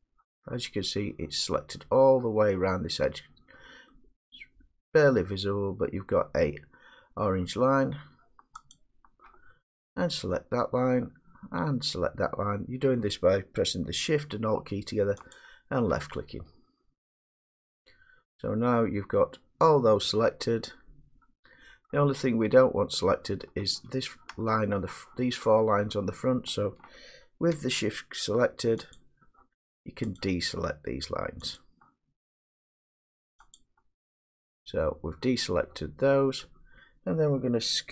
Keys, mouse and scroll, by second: 7.3 middle click, 8.7 click, 10.8 middle click, 15.4 click, 21.9 middle click, 29.0 shift+click, 36.4 middle click.